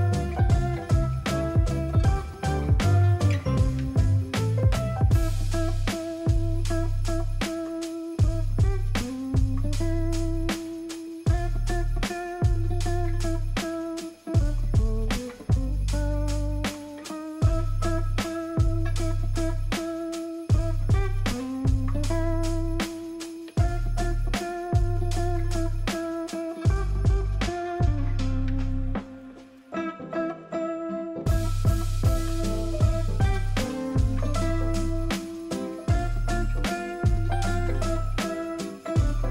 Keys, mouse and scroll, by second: 3.7 ctrl+a, 6.1 ctrl+d, 14.2 alt+click, 16.1 alt+click, 20.7 alt+click.